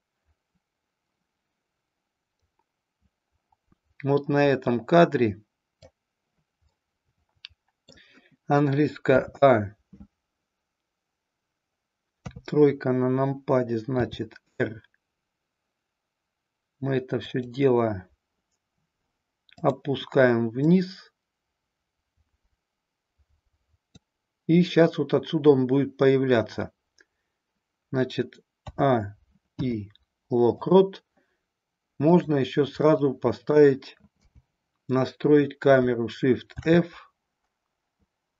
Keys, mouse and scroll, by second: 6.7-7.9 middle drag, 9.1 a, 12.2 KP_3, 13.8 r, 17.4 click, 19.6 click, 20.7-24.1 drag, 28.6 a, 29.5 i, 32.1 click, 32.8-33.7 middle drag, 34.2 KP_0, 36.5 shift+f.